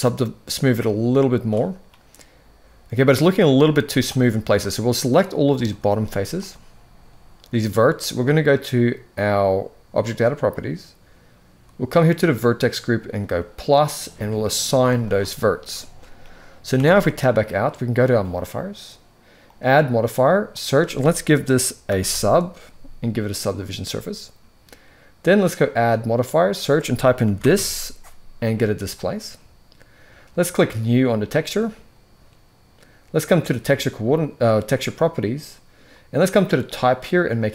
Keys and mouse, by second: 3.5 z, 4.3 click, 5.5 z, 9.6 click, 13.0 click, 14.4 click, 14.5 click, 16.4 Tab, 18.0 click, 19.2-23.5 drag, 25.3-28.9 drag, 33.3 click, 36.4-37.2 drag.